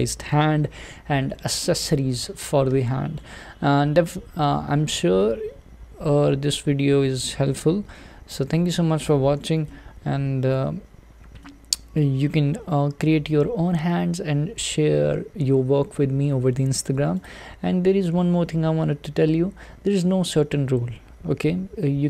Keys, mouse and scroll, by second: 1.1-1.6 scroll down 2, 1.6-5.1 middle drag, 5.1 scroll down 1, 5.3-13.4 middle drag, 13.4-22.0 scroll up 1.